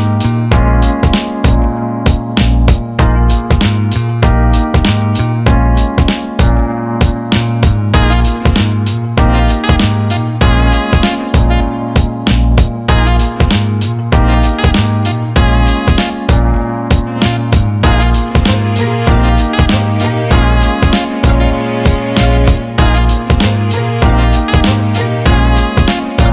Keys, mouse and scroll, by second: 0.5 alt+shift+middle click, 0.8 alt+middle click, 1.7 click, 3.4 alt+middle click, 4.1 shift+click, 4.4 alt+middle click, 5.3 alt+middle click, 6.2-8.1 drag, 8.1 alt+middle click, 9.6 ctrl+z, 11.5 click, 11.7 click, 12.7-14.4 drag, 14.6 alt+middle click, 15.6 alt+middle click, 16.7-17.7 alt+middle drag, 17.9 alt+middle click, 19.1 click, 20.1 alt+middle click, 20.8 alt+middle click, 23.9-25.5 drag.